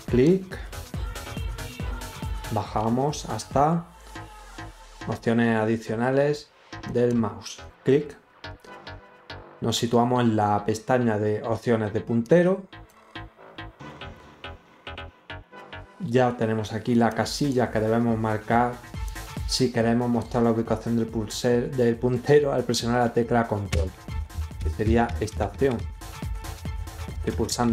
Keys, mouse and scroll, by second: 2.2 scroll up 2, 2.7 scroll down 2, 6.8 click, 12.2 click, 17.0 click, 19.0 click.